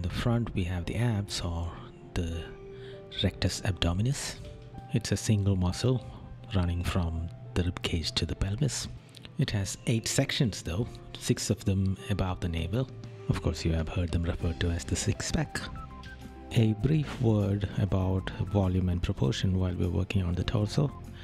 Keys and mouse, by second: 0.1 right click, 2.5 right click, 5.6 right click, 7.3 right click, 8.2 right click, 9.4 right click, 10.3 right click, 11.2 right click, 13.0 right click, 14.1 right click.